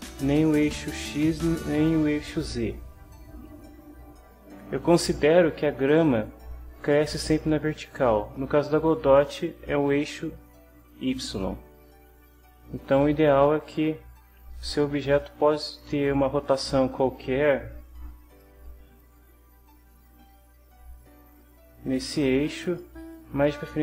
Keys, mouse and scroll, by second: 14.5 middle click, 15.6 click, 17.2-18.5 drag, 18.9-22.9 drag, 23.5 middle click.